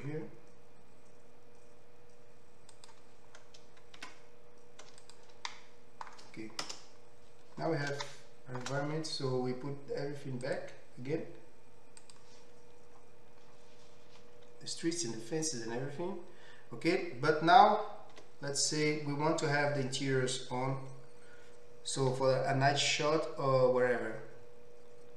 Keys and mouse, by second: 4.6 Tab, 6.6 KP_0, 10.4-25.1 drag, 18.1 z.